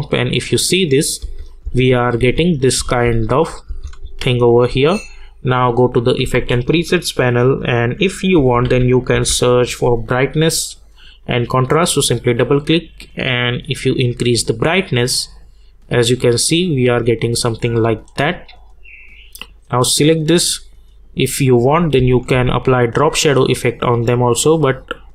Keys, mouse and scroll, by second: 6.0 click, 6.3 ctrl+a, 8.1-9.6 typing, 10.9-18.7 drag, 19.0 click, 22.0 space.